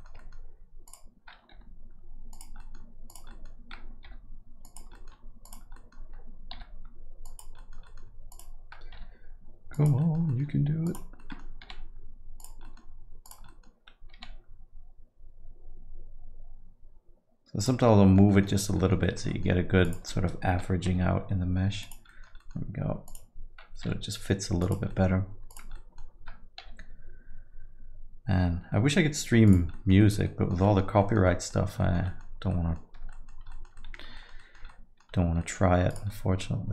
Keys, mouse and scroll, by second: 0.2 middle click, 0.8 click, 1.5 g, 2.6 middle click, 3.1 click, 3.3 alt+middle click, 4.0 g, 4.9 alt+middle click, 5.4 click, 5.7 middle click, 6.8 g, 7.6 middle click, 7.8 alt+middle click, 8.3 click, 9.2 g, 10.0 middle click, 10.3 alt+middle click, 10.8 click, 11.2 middle click, 11.6 g, 12.6 middle click, 13.2 click, 13.5 alt+middle click, 14.1 g, 17.8 alt+middle click, 18.3 alt+middle click, 18.5 middle click, 18.8 alt+middle click, 19.0 middle click, 19.3 alt+middle click, 19.8 click, 20.1 alt+middle click, 20.8 g, 22.1 middle click, 22.4 alt+middle click, 23.0 click, 24.1 g, 24.9 middle click, 25.5 click, 25.7 alt+middle click, 26.8 g, 29.7 middle click, 30.0 alt+middle click, 30.2 middle click, 30.6 middle click, 31.0 alt+middle click, 31.2 middle click, 31.6 scroll down 1, 31.8 alt+middle click, 32.0 middle click, 32.3 scroll down 2, 32.5 alt+middle click, 33.1 middle click, 33.5 alt+middle click, 34.1 alt+middle click, 34.7 alt+middle click, 35.9 click, 36.1 alt+middle click.